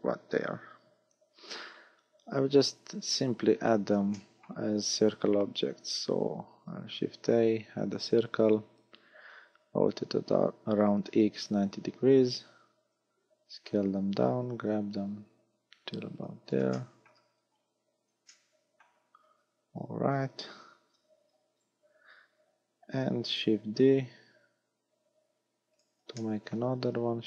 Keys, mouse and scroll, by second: 3.1-4.2 scroll down 7, 4.2 shift+middle click, 6.6 shift+a, 9.6 r, 12.4-12.9 scroll up 1, 12.9 s, 13.7 click, 14.6 g, 16.3 click, 16.8 shift+middle click, 17.4 scroll up 5, 18.4 shift+middle click, 23.6 shift+d, 25.8 click, 26.2 shift+middle click, 27.0 shift+d.